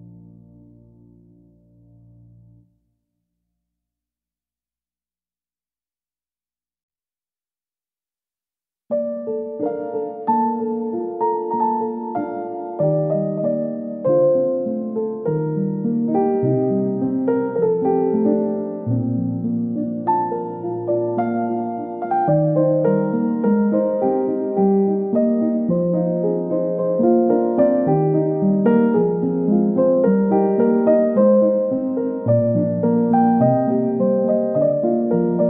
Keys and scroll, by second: 16.0 ctrl+x, 16.3 ctrl+shift+v, 19.6 ctrl+x, 19.9 ctrl+shift+v, 21.9 ctrl+c, 22.0 ctrl+v, 31.4 ctrl+z, 35.1 ctrl+g.